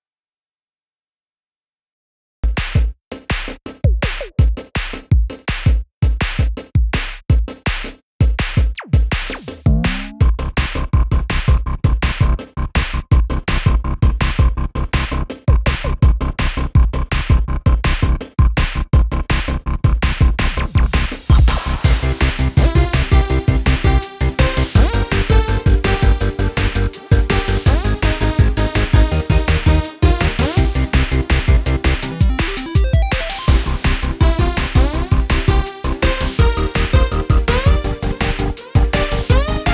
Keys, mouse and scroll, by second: 1.2 click, 1.6-1.9 scroll down 2, 1.9-4.4 middle drag, 4.4 ctrl+r, 7.4 click, 7.9 middle click, 8.3 ctrl+r, 10.0 click, 10.9 ctrl+r, 13.4 middle click, 13.9 click, 14.2 middle click, 14.8 ctrl+r, 17.6 click, 18.0-19.1 middle drag, 19.1 click, 20.2 click, 21.5 i, 23.6 x, 25.7-26.7 drag, 28.1-30.1 drag, 30.1 scroll down 2, 30.3-32.5 middle drag, 32.5-34.0 drag, 35.0 middle click, 35.8 click, 36.4-37.8 middle drag, 37.8 scroll up 2, 38.2-39.4 middle drag, 39.4-39.7 scroll up 1.